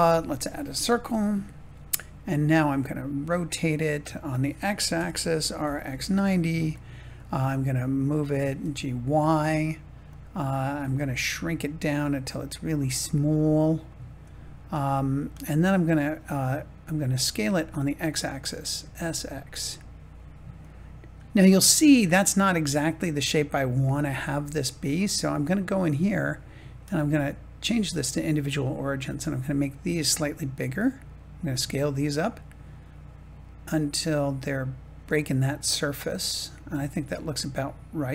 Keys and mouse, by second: 2.3 middle click, 4.9 r, 5.3 x, 5.6 9, 5.8 0, 6.6-8.3 drag, 8.3 g, 8.5 y, 10.0 click, 10.7 s, 12.4 click, 13.0 middle click, 15.2 middle click, 18.7 s, 19.0 x, 23.9 Tab, 24.8 click, 27.0 click, 30.2 s, 35.1-38.1 middle drag.